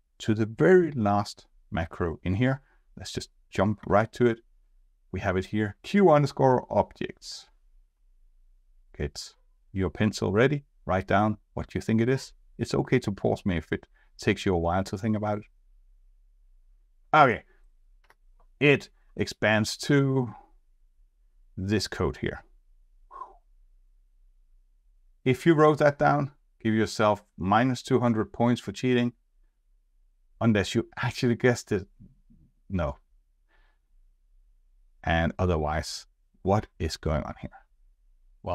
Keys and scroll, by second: 3.8 F4, 18.0 F2.